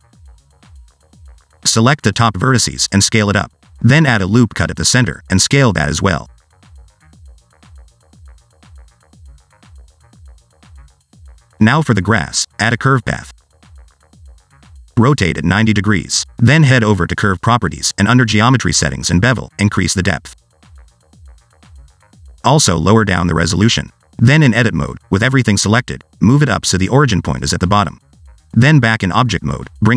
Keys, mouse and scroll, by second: 0.2 click, 1.5 scroll up 2, 1.7 shift+middle click, 2.2 click, 3.4 s, 5.0 ctrl+r, 6.3 s, 7.9 click, 9.0 alt+z, 9.1 Tab, 9.7 right click, 12.2 shift+a, 15.6 r, 17.6 click, 18.5-19.0 scroll down 2, 19.0 click, 19.3-20.9 scroll down 5, 20.9 click, 22.1 click, 22.7 shift+click, 24.6 click, 24.7 click, 25.4 click, 25.8 Tab, 28.2 click, 29.5 Tab.